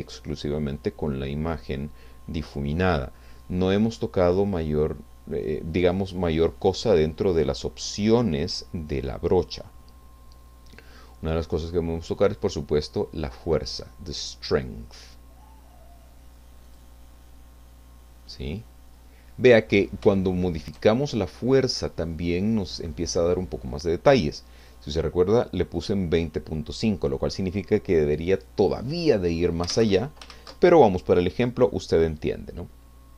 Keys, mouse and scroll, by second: 12.5-14.5 drag, 16.8 click, 18.3-18.9 scroll up 2, 18.9-19.3 scroll up 2, 20.1 shift+middle click, 24.6 click, 29.7 alt+Tab, 30.4 ctrl+z.